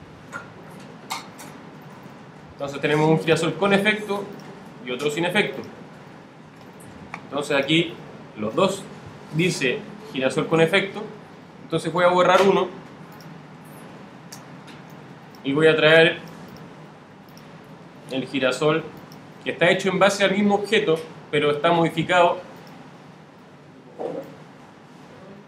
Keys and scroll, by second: 10.1 alt+super++, 13.4 alt+super+Delete.